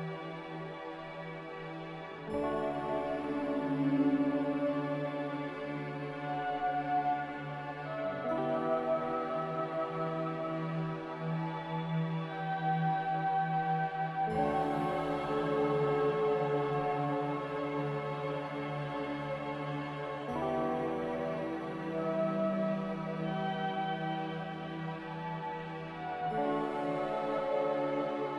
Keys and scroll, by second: 1.9 1, 1.9 ., 10.9 n.